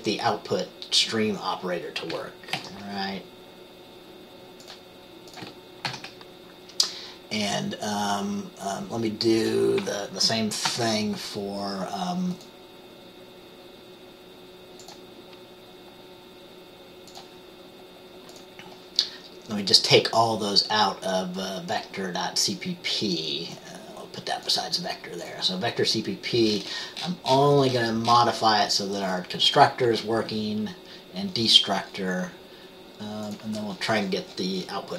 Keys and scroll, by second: 2.7 ctrl+x, 6.0 ctrl+v, 10.8 ctrl+s.